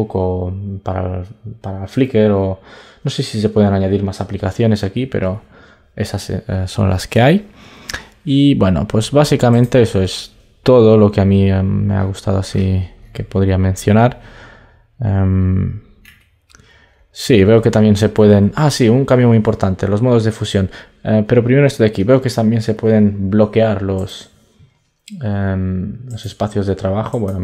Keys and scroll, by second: 22.0 super+Tab.